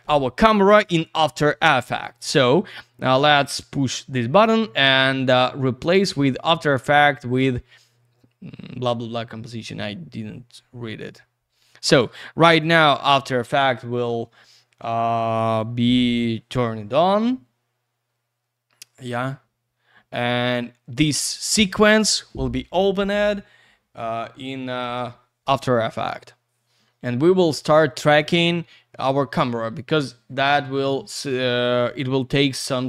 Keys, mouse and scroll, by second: 2.2 right click, 2.3 right click, 6.0 click.